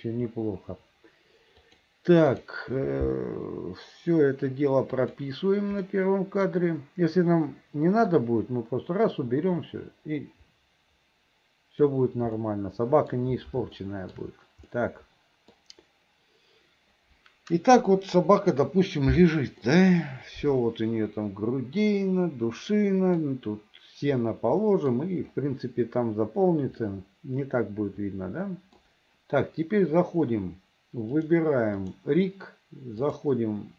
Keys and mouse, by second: 1.8 click, 5.1 click, 6.0 middle click, 8.2-12.0 drag, 12.5 middle click, 13.9 shift+middle click, 14.8 middle click, 19.8-23.3 middle drag, 24.8 middle click, 27.0-28.9 middle drag, 31.3 middle click, 31.9 middle click, 33.3-33.7 middle drag.